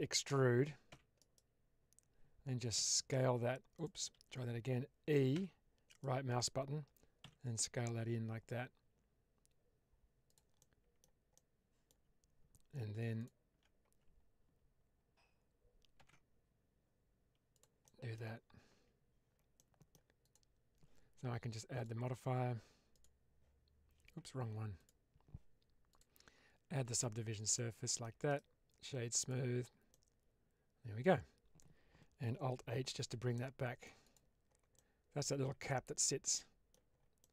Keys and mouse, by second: 0.8 e, 1.1 right click, 2.7 s, 3.6 click, 4.0 ctrl+z, 5.2 e, 5.8 right click, 7.1 s, 10.5 middle click, 11.2 middle click, 13.2 alt+click, 15.9 ctrl+b, 17.4 click, 17.7 middle click, 18.6 Tab, 19.5-19.8 middle drag, 20.1 click, 21.7-23.0 drag, 24.3 ctrl+z, 24.7 click, 25.8-27.0 drag, 27.5-28.0 middle drag, 28.2 right click, 29.8-31.0 middle drag, 32.8 alt+h, 33.2-33.7 middle drag, 33.9 click, 34.6-35.2 middle drag, 35.6-36.7 middle drag, 37.1-37.3 middle drag.